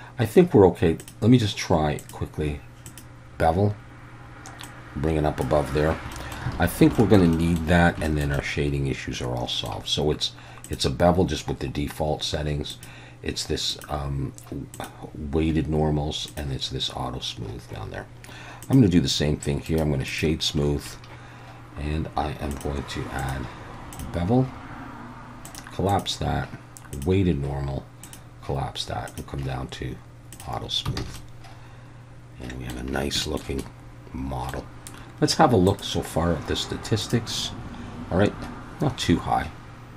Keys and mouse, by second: 1.0 drag, 2.0-3.0 drag, 4.6-5.4 drag, 6.1 middle drag, 6.5 alt+a, 7.0 shift+middle drag, 7.3 middle drag, 8.1 shift+middle click, 8.3-9.7 middle drag, 10.7 drag, 12.8 click, 13.8 click, 14.8 click, 16.3 drag, 19.7 right click, 23.3-24.0 drag, 25.5 click, 25.9-27.0 drag, 28.0 drag, 29.1 drag, 30.3 click, 31.0 alt+a, 31.2-32.7 middle drag, 33.2 shift+middle drag, 33.6-34.5 middle drag, 35.7-37.3 drag.